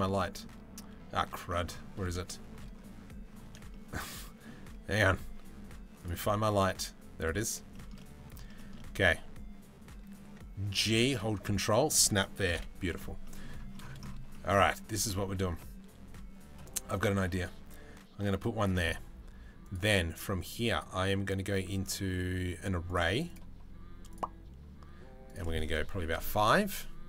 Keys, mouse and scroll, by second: 1.1 middle click, 1.9-2.2 shift+middle drag, 3.4 shift+middle click, 3.9-4.2 shift+middle drag, 7.6 middle click, 8.2 shift+middle click, 10.5 g, 12.2 KP_Decimal, 12.9 middle drag, 14.0 shift+middle drag, 14.8 shift+middle drag, 16.2 g, 20.4 right click, 23.0-23.9 drag, 25.0 click, 26.9-27.0 drag.